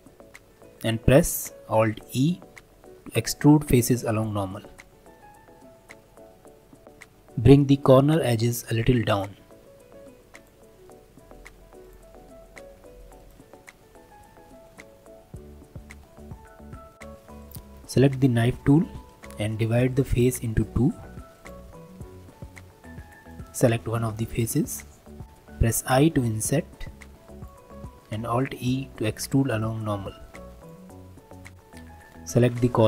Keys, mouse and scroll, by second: 2.0 alt+e, 6.8-9.1 middle drag, 9.1 click, 10.3 alt+click, 10.9 middle click, 11.8 alt+shift+click, 12.3 middle click, 13.2 alt+shift+click, 14.2 g, 17.0 middle click, 17.4-24.3 drag, 24.6-26.0 middle drag, 27.7 middle click, 28.3 alt+e, 31.0-31.5 scroll up 2.